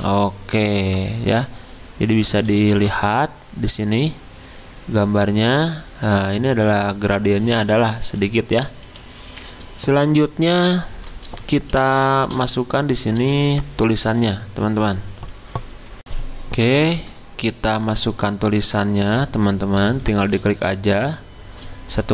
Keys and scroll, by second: 2.7 f, 8.8 Escape, 16.0 F9.